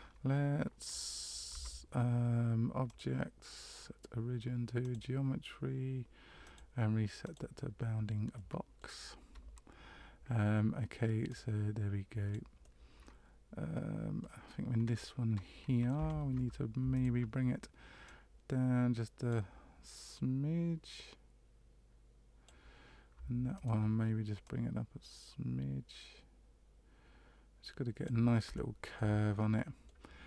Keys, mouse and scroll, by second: 1.5 Tab, 2.8 click, 6.4 click, 8.3 middle click, 9.2 Tab, 11.3 click, 12.6 middle click, 15.9 2, 16.9 alt+right click, 18.0 click, 20.1 click, 23.5 alt+right click, 24.4 click, 28.5 shift+middle click, 29.4 middle click.